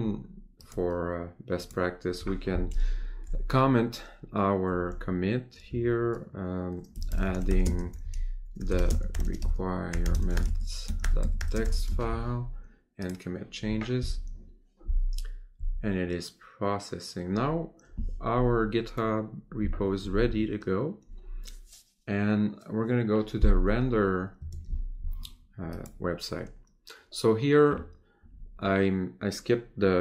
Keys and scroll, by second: 7.6 space, 8.8 space, 11.5 space, 24.5 ctrl+Tab.